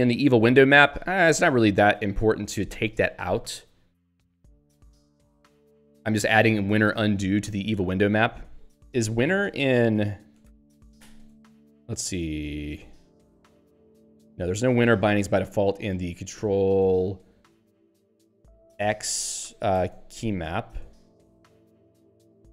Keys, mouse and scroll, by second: 0.0 Return, 0.9 Down, 1.7 Up, 4.3 Down, 4.6 Up, 4.9 Left, 5.8 Down, 6.1 Right, 11.0 ctrl+h, 12.9 click, 13.2-14.3 typing, 14.7 ctrl+g, 15.7 click, 18.9 q, 21.6 ctrl+h.